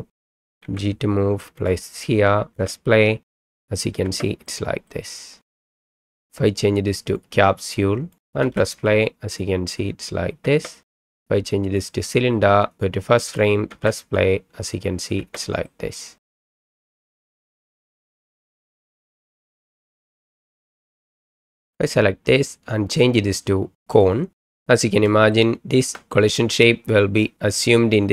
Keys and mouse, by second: 0.2 click, 0.6 g, 1.6 click, 2.5 space, 4.0 space, 4.6 middle click, 4.8 click, 5.5 ctrl+z, 7.2-8.2 drag, 8.4 space, 10.4 space, 11.1-11.9 drag, 13.7 space, 15.2 space, 15.8 middle click, 16.5 KP_1, 16.6 middle click, 16.9 click, 17.2 g, 17.7 space, 20.7 space, 20.9 middle click, 21.7 click, 22.9-24.0 drag, 25.3 shift+middle click, 26.1-26.6 middle drag.